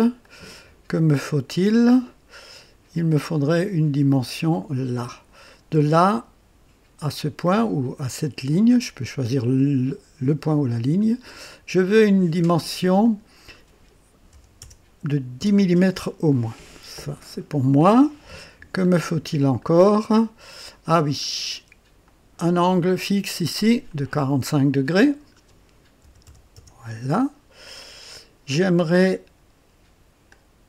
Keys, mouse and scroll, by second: 0.2-1.0 right drag, 3.4-5.8 drag, 8.3 click, 13.0 click, 14.3 KP_1, 14.6 KP_0, 15.4 Return, 16.4 typing, 18.5-18.8 scroll up 2, 19.1 typing, 19.6-20.7 right drag, 21.0-21.3 scroll down 1, 22.0 click, 23.5 click, 24.8 click, 26.0 KP_4, 26.4 KP_5, 26.6 Return, 30.3-30.6 drag.